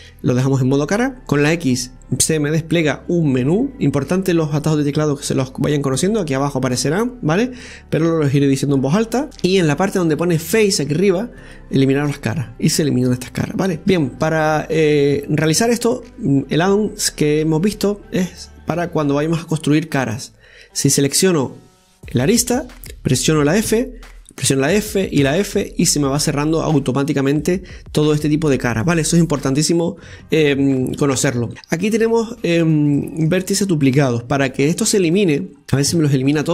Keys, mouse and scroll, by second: 13.8 scroll up 3, 13.9 shift+middle click, 14.6 scroll up 2, 15.2-16.9 shift+middle drag, 16.9 right click, 18.2 click, 19.9-21.1 scroll down 2, 21.1 right click, 23.6 f, 27.0-27.4 scroll down 3, 27.4-30.9 middle drag, 30.9 ctrl+z, 31.5 click, 31.7 scroll down 2, 33.8 middle click, 34.4-34.7 scroll up 3, 35.6 scroll down 4.